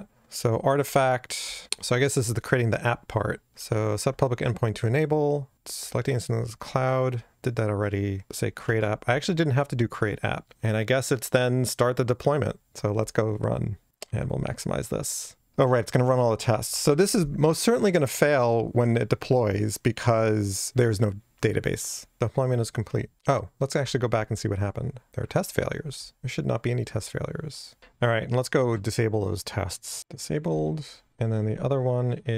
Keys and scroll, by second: 27.8 shift+super+F12, 30.0 Return.